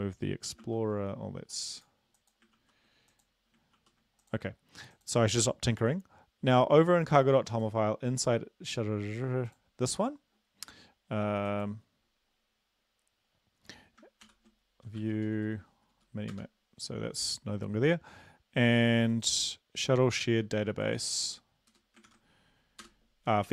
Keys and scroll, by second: 0.6 ctrl+e, 2.5 ctrl+e, 3.8 ctrl+e, 14.2 ctrl+p, 14.8-15.5 typing, 15.8 Down, 15.9 Down, 16.3 Return, 20.3 ctrl+c, 21.7 Return, 22.0 ctrl+v, 22.8 Return.